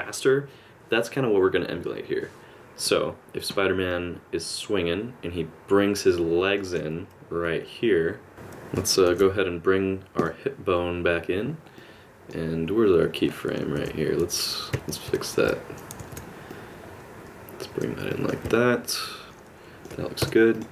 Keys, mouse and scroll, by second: 3.9 click, 7.4 middle click, 8.3 i, 9.1 alt+h, 10.2 click, 11.8 middle click, 13.8 alt+h, 15.5 ctrl+z, 16.0 alt+a, 16.1 click, 16.6 alt+r, 16.7 middle click, 18.5 middle click, 20.2 i.